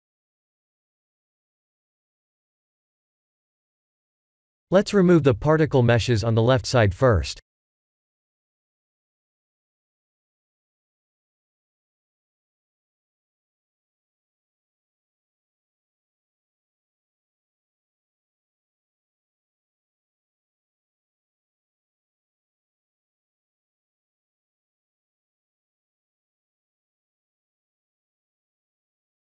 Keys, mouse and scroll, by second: 4.5 shift+z, 5.0-5.8 shift+middle drag, 6.2 click, 7.1 b, 12.3 x, 15.5 ctrl+z, 17.1 click, 18.0 click, 20.0 click, 21.1 click, 21.9 x, 23.4 middle click, 24.3 shift+z, 24.6-26.2 middle drag, 26.5-27.4 middle drag, 28.9 click.